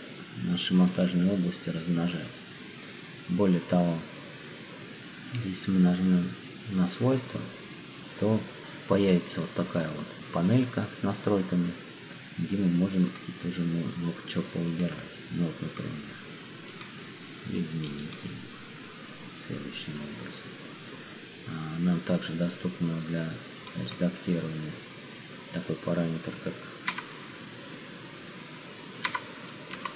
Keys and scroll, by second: 26.9 1, 29.0 1, 29.7 0.